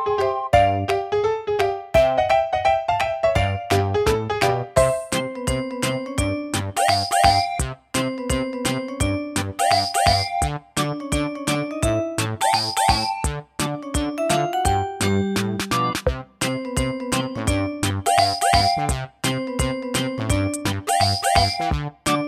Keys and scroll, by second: 17.0 super+c, 17.0 super+v.